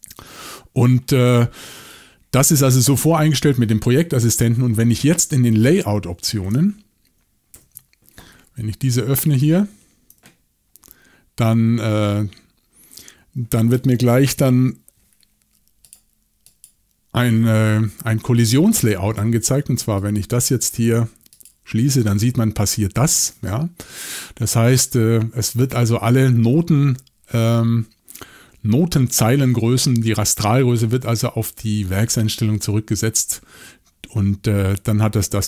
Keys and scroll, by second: 7.5 shift+super+l.